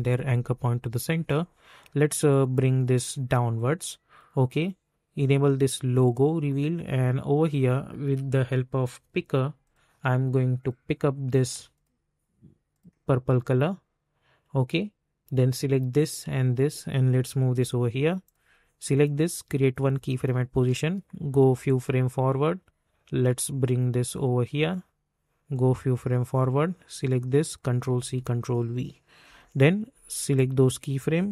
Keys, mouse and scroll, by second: 2.3-5.3 drag, 17.4 [, 18.2 click, 20.5 space, 23.1-27.4 drag, 27.9 ctrl+c, 28.1 ctrl+v, 29.2 -, 30.3 click.